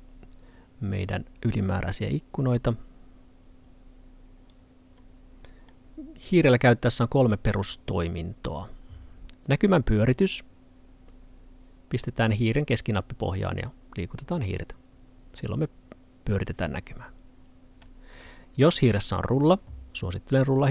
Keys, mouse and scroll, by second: 2.1 click, 5.7 middle click.